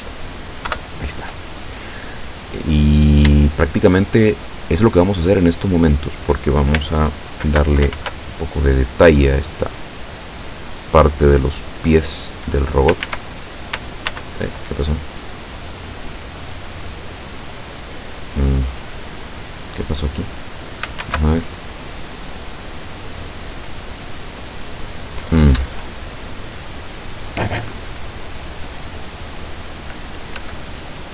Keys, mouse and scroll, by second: 0.7 KP_7, 3.6-6.4 shift+middle drag, 8.0 ctrl+r, 9.6 click, 13.1 ctrl+z, 14.1 ctrl+z, 18.7 click, 21.1 alt+e, 22.1 scroll down 1, 22.3-22.7 scroll up 1, 22.8 click, 28.9 scroll down 1, 29.1 scroll up 1, 30.5 Escape.